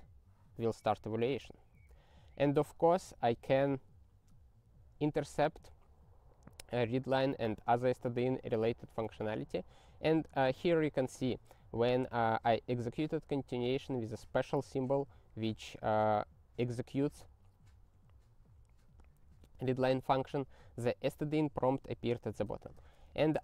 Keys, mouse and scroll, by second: 1.7 ctrl+n, 1.9 ctrl+n, 8.9 ctrl+e, 22.3-23.4 typing.